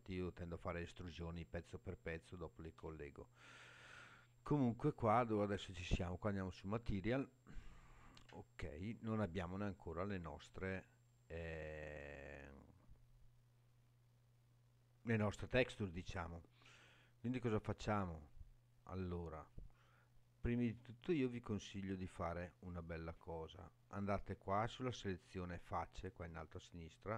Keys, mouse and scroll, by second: 3.8-4.4 scroll up 3, 4.4 scroll down 2, 7.1 click, 20.5 click.